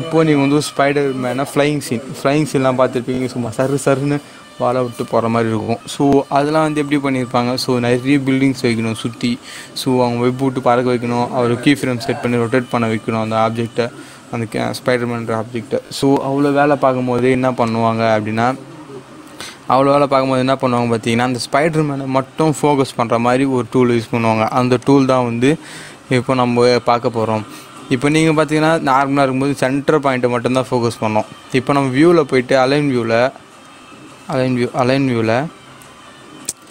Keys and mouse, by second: 17.5-22.9 drag, 24.8 click, 31.4 click.